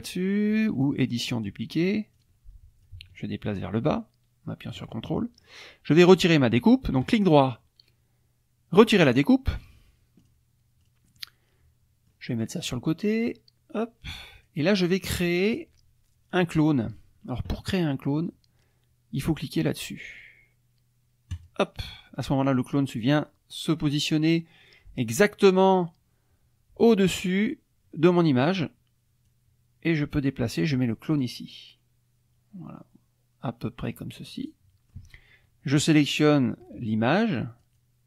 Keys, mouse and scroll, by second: 1.2 click, 2.1 click, 2.8-4.9 ctrl+drag, 5.0-5.6 ctrl+drag, 7.0 right click, 8.8 click, 10.2 click, 10.8 click, 11.2-12.3 drag, 12.6-14.6 drag, 21.3 click, 29.3-34.0 drag, 34.3 click, 37.6 shift+click.